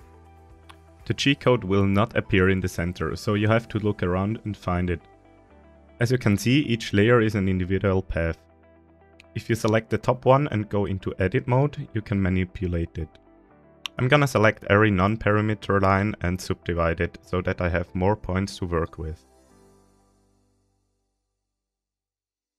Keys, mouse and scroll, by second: 0.0-0.9 scroll down 4, 0.9 /, 1.9-2.3 shift+middle drag, 2.3-2.6 scroll down 1, 2.8-3.4 shift+middle drag, 3.6 scroll up 1, 4.3 right click, 4.3 scroll up 2, 4.9-5.2 shift+middle drag, 5.4-5.9 middle drag, 6.3 right click, 6.7 right click, 7.2 right click, 7.6 right click, 8.1 right click, 9.5 Tab, 11.0 KP_7, 11.8-12.5 scroll up 1, 13.4 click, 14.2 right click, 15.8 right click, 16.2 right click, 16.5 right click, 16.9 right click, 18.3 c.